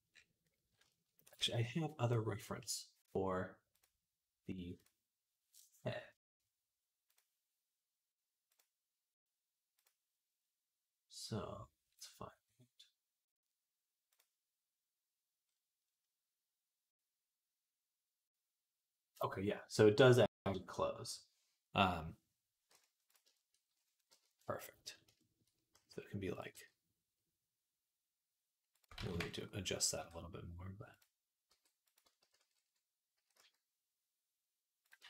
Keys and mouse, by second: 1.2 ctrl+s, 23.4 middle click, 24.2 KP_3, 25.1 shift+middle click, 25.6 s, 26.4 g, 28.8 ctrl+z, 29.8 r, 31.3 r, 32.2 alt+r, 33.0 s, 34.9 ctrl+z.